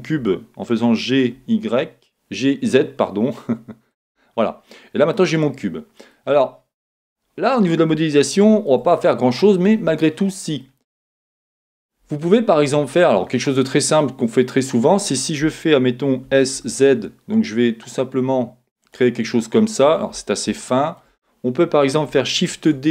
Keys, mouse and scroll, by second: 0.5 g, 4.5-9.6 middle drag, 9.6 right click, 9.7-10.9 middle drag, 10.9-12.9 right drag, 12.9 middle click, 13.5 right click, 13.9 middle click, 14.5-18.8 right drag, 16.2 s, 18.8 middle click, 19.2 middle click, 20.5 middle click, 20.9-22.9 right drag, 22.5 shift+d.